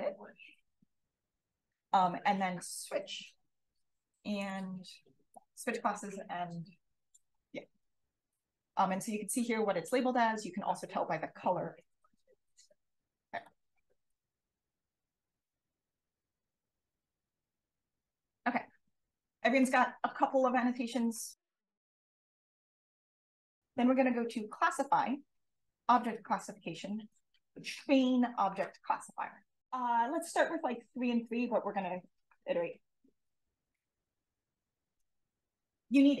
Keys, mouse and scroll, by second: 1.4 click, 3.9 click, 5.3 click, 13.2 click, 13.6 click, 15.7 drag, 17.0-17.9 drag, 18.0-22.4 drag.